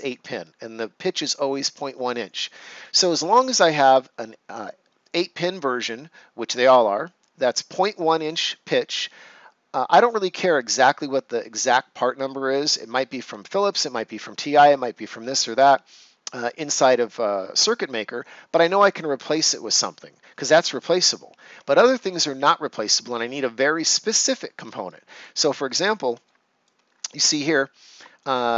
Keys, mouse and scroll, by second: 24.2 ctrl+scroll down 1, 24.8 right click, 25.7-26.0 ctrl+scroll up 1, 26.1 right click, 26.8 ctrl+scroll up 1.